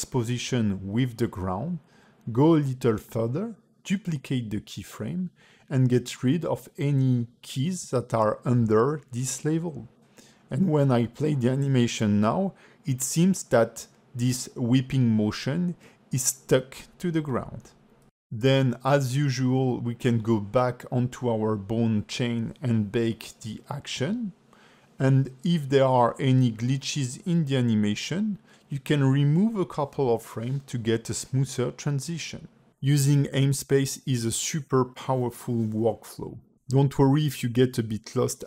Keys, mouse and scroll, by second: 1.4 click, 4.4 shift+d, 6.9 click, 7.8 x, 8.2 click, 8.8 x, 10.1 click, 10.5 scroll down 2, 10.8 ", 11.1 space, 11.4 ", 12.5 scroll up 3, 18.9 space, 19.5 ctrl+Tab, 19.8 click, 20.6 scroll up 3, 20.9 ctrl+Tab, 21.3 click, 21.7 shift+click, 22.1 q, 24.2-24.9 scroll down 10, 25.0 ctrl+middle click, 25.6 scroll down 2, 25.7 space, 32.7 space, 33.1 scroll up 4, 34.0 ctrl+Tab, 34.5 ctrl+Tab, 35.0 shift+middle click, 35.5 shift+e, 36.4 click, 36.7 click, 37.2-38.2 typing.